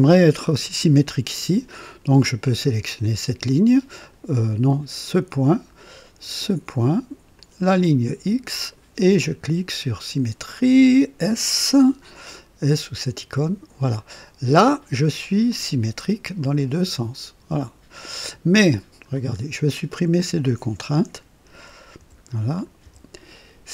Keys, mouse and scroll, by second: 2.9 click, 4.0 click, 5.3 click, 7.3 click, 8.6 click, 13.2 s, 13.3 s, 15.5-18.4 drag, 19.1 scroll down 1, 20.4 click, 22.0 Delete, 22.5 click, 22.8 Delete.